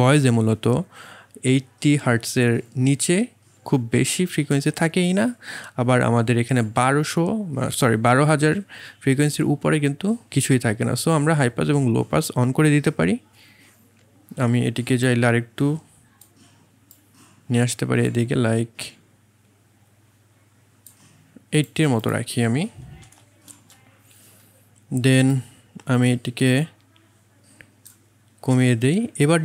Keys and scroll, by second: 23.0 KP_8, 23.1 KP_0, 23.5 Return.